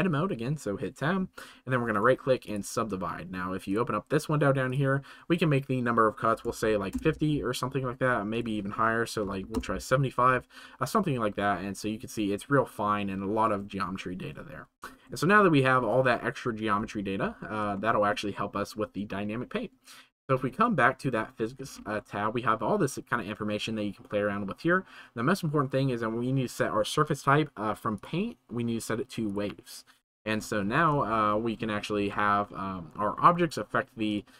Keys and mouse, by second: 2.0 click, 3.6 click, 4.6 click, 8.4 click, 15.3 shift+middle click, 17.7-18.1 shift+middle drag, 28.0-29.4 drag, 31.1-31.8 shift+middle drag, 34.1 click.